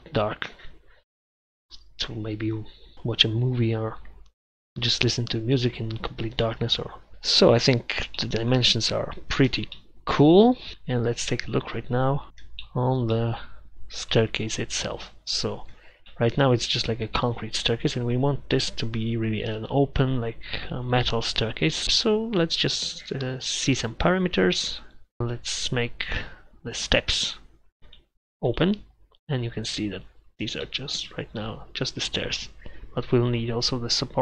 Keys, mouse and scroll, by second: 11.5-12.4 middle drag, 12.7 middle drag, 14.2 KP_1, 14.7 KP_3, 17.2 KP_1, 18.1 KP_3, 29.3-30.3 middle drag, 30.8 middle click, 33.5-34.2 middle drag.